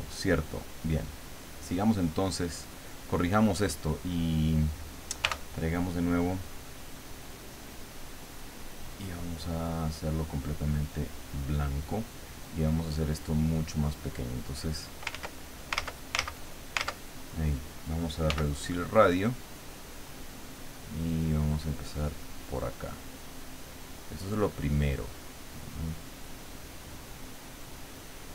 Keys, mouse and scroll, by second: 1.1 click, 2.3 click, 5.2 t, 8.2-10.1 drag, 11.0 click, 12.6-15.0 drag, 15.1 ctrl+z, 15.7 ctrl+z, 18.3 f, 19.4 click, 21.0-24.4 drag, 25.0 click.